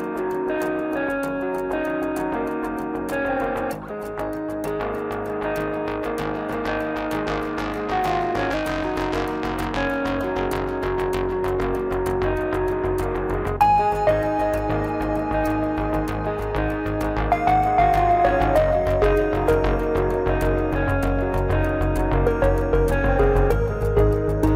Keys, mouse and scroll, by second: 7.0 space, 9.5 shift+click, 10.2 shift+click, 10.9 shift+click, 17.6 space, 17.7 Escape, 19.0 shift+middle click, 22.5 ctrl+z, 23.2 ctrl+z.